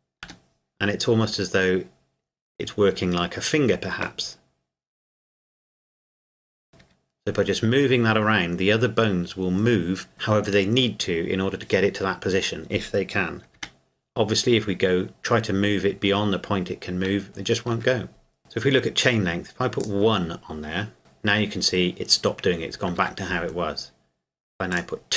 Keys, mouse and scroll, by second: 0.2 g, 6.8 Escape, 13.5 g, 17.7 Escape, 19.8 click, 21.0 g, 23.0 Escape, 24.7 click.